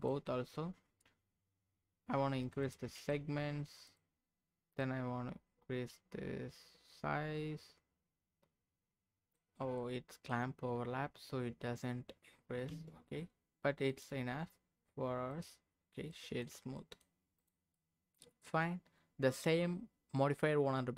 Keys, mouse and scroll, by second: 0.0 click, 2.4 click, 2.6 click, 3.8 click, 4.8-7.8 drag, 9.7 middle click, 12.7 q, 13.9-15.5 right drag, 16.1 middle click, 16.5-16.8 scroll down 2, 16.7 middle click, 17.4 click, 17.7 middle click.